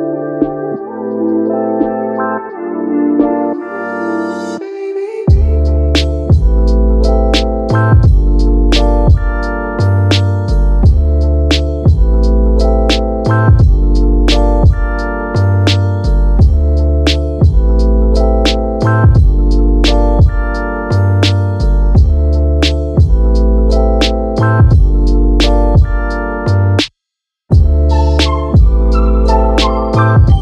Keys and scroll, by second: 16.2 super+z.